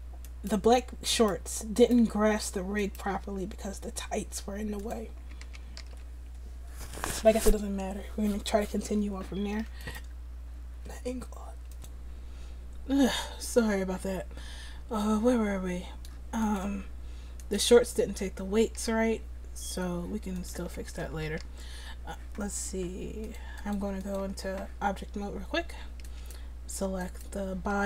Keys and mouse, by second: 3.2 r, 5.2 a, 5.4 a, 5.8 alt+r, 9.9-17.5 drag, 18.8 r, 20.7 a, 20.9 a, 21.3 alt+r, 23.2 click.